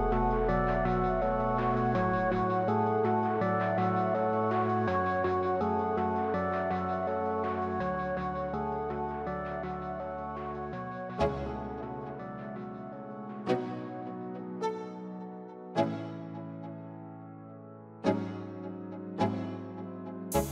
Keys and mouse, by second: 3.1 middle click, 4.5 ctrl+z, 5.4 ctrl+z, 6.1 shift+z, 7.0-8.3 middle drag, 9.7 shift+KP_Add, 11.2 ctrl+KP_Subtract, 15.5 ctrl+KP_Add, 16.2 ctrl+KP_Add, 16.7 ctrl+KP_Add, 17.3 ctrl+KP_Add, 17.5 ctrl+KP_Add, 17.8 ctrl+KP_Add, 18.0 ctrl+KP_Add, 18.3 ctrl+KP_Add, 18.6 ctrl+KP_Add, 19.0 ctrl+KP_Add, 19.5 ctrl+KP_Add, 20.1 ctrl+KP_Add, 20.4 ctrl+KP_Add.